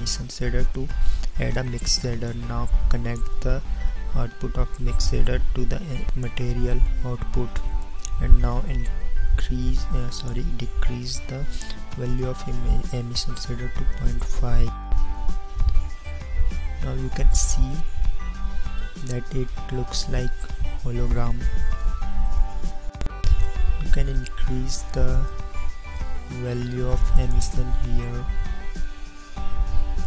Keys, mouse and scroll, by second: 10.6-14.0 drag, 17.8 click, 25.8-28.9 drag.